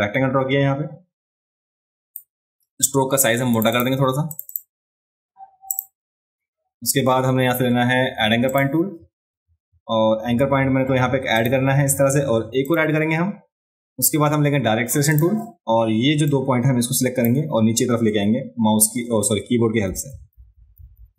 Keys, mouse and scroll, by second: 3.5 click, 3.7 click, 4.3 click, 4.5 click, 5.7 click, 8.5 click, 11.4 click, 12.7 click, 15.1 click, 16.3 click.